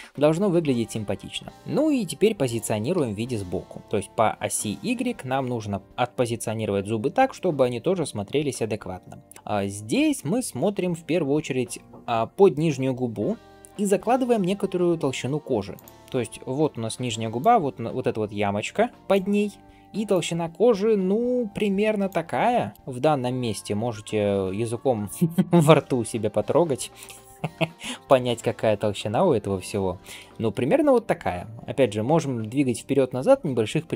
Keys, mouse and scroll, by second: 0.0 ctrl+s, 1.0-1.5 scroll up 1, 2.8 g, 15.9-17.1 scroll up 1, 17.1-20.0 d, 17.2-19.3 drag, 20.0-22.0 drag, 22.0-23.5 typing, 22.6 right click, 26.9-27.4 scroll down 1, 27.7 shift+middle drag, 30.8 g.